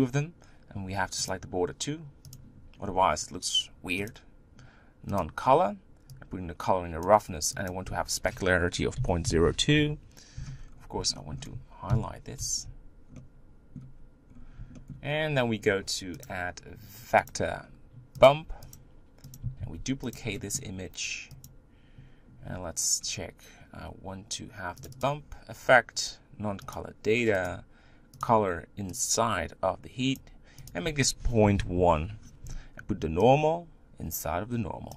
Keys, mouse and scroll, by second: 5.2-7.0 drag, 9.7 click, 10.6-11.2 scroll down 4, 11.2 shift+middle click, 11.9 ctrl+KP_Decimal, 12.8 z, 13.1-14.2 middle drag, 14.2-14.8 scroll up 2, 14.8-19.2 shift+middle drag, 19.2 click, 19.6 shift+d, 21.5-25.1 drag, 27.5 click, 33.2 click.